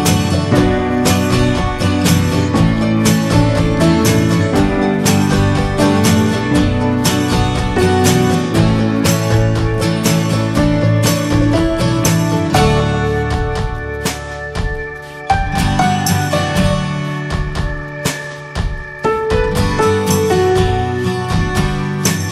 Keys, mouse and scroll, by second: 0.5 3, 0.6 click, 1.1 alt+shift+click, 1.6 shift+middle click, 2.3 e, 2.7 alt+s, 4.6-5.7 middle drag, 5.7-6.6 scroll up 1, 6.6 alt+s, 7.9 2, 8.2 click, 8.6 alt+shift+click, 9.0 middle click, 9.5 ctrl+b, 11.5 scroll down 4, 11.8 middle click, 11.9 scroll up 1, 12.0 Tab, 12.1 click, 12.5 shift+middle click, 12.8 scroll down 1, 13.0 middle drag, 13.2 click, 13.5-14.3 middle drag, 14.3 ctrl+s, 14.5 click, 14.7 ctrl+a, 15.1 click, 15.3 scroll down 2, 15.5-15.9 middle drag, 15.9 scroll up 1, 16.3 drag, 16.8 alt+middle drag, 17.0-17.7 alt+scroll up 3, 17.5 shift+middle drag, 18.0 click, 19.3 scroll down 4, 19.9 shift+middle drag, 20.1-20.6 shift+scroll up 2, 20.2 click, 21.3 click.